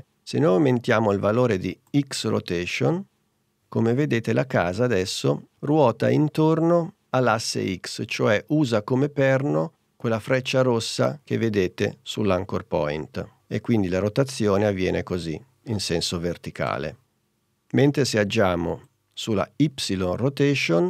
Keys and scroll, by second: 17.1 super+z.